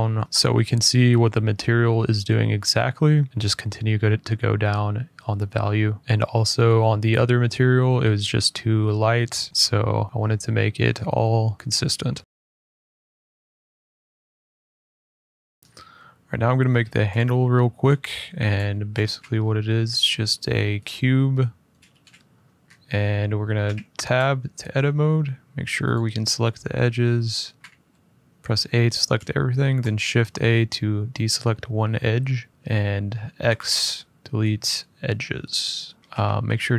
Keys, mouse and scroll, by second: 0.2-0.9 scroll up 2, 0.9 middle click, 1.3 middle click, 3.9 click, 4.3 click, 4.5 click, 5.0 click, 6.2 click, 6.6 click, 7.5 middle click, 8.3 click, 9.0 click, 13.1 click, 13.4 middle click, 15.3 middle click, 15.5 z, 15.6 shift+middle click, 16.5 middle click, 16.9 click, 18.8 a, 20.6 click, 21.7 f, 22.2 middle click, 22.4 middle click, 22.4 middle click, 23.4 Tab, 25.7 click, 27.3 a, 29.7 shift+click, 30.8 middle click, 32.5 middle click, 33.2 x, 35.5 click, 36.0 middle click.